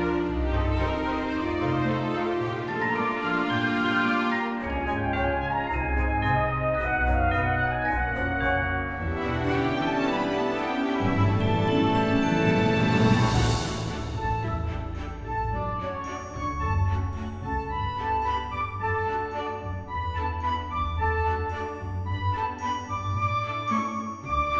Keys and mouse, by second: 0.0 alt+z, 0.6 g, 0.9 z, 1.5 click, 1.8 g, 1.9 z, 2.5 click, 3.4 g, 3.7 z, 6.1 click, 9.4 click, 9.6 e, 11.0 click, 11.4 Tab, 11.8 s, 13.0 click, 13.9 KP_7, 14.7 g, 15.7 click, 16.1 middle click, 18.0 middle click, 20.6 right click, 21.0 click.